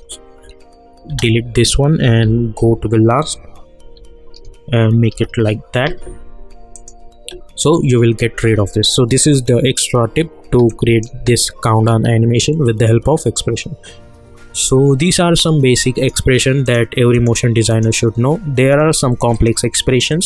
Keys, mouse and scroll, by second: 2.2 Right, 5.1 shift+0, 6.7 click, 8.4 space, 10.4 space, 10.7 click, 11.1 space, 14.6 space, 15.3 click.